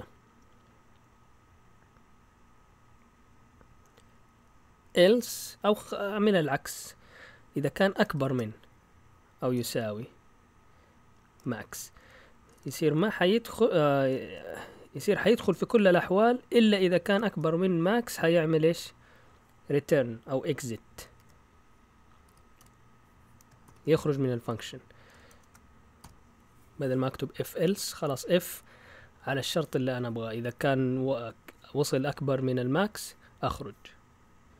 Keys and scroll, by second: 8.1 shift+., 11.5-14.0 typing, 16.7 shift+Tab, 17.7 Return, 20.7-22.5 typing, 23.6-26.5 typing.